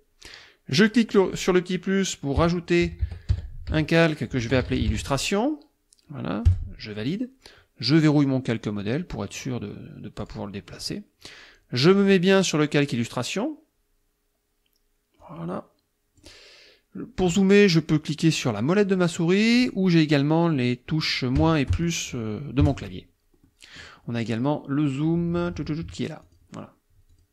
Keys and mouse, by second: 0.7 click, 2.2-5.4 typing, 6.5 Return, 8.0 click, 8.8 click, 10.2 click, 11.9 click, 15.2-16.4 drag, 18.9 middle click, 19.4 middle click, 21.4 KP_Subtract, 21.7 KP_Add, 22.6 KP_Add, 23.5 click, 26.3 click, 27.1 click.